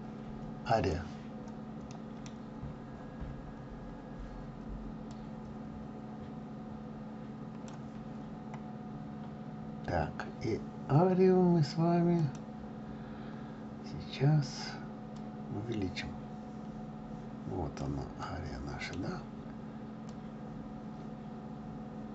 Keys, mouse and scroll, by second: 2.0 middle click, 2.4-3.7 scroll down 15, 3.7-4.2 scroll up 5, 5.5 click, 8.3-9.9 scroll up 6, 12.3 click, 15.4-18.4 drag, 18.4-20.4 middle drag, 20.4 click.